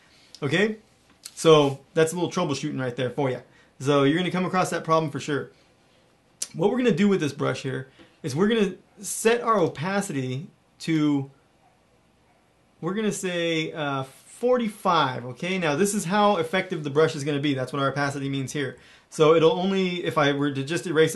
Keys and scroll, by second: 18.0 ], 18.2 ], 18.4 ], 18.7 ].